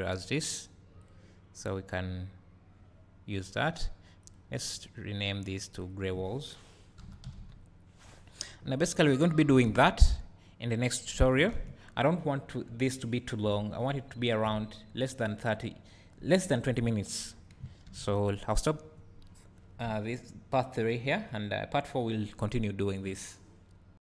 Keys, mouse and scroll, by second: 3.5-9.2 drag.